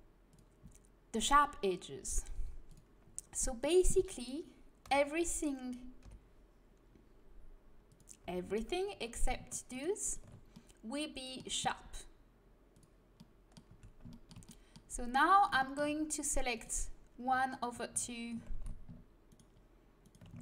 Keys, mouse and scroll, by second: 3.0-4.8 middle drag, 4.8 l, 6.0 l, 7.8-9.7 drag, 8.2 l, 9.7 right click, 10.2 middle click, 12.7-14.6 drag, 13.6 a, 16.5-17.5 middle drag, 17.5-20.3 right drag, 18.5 ctrl+z.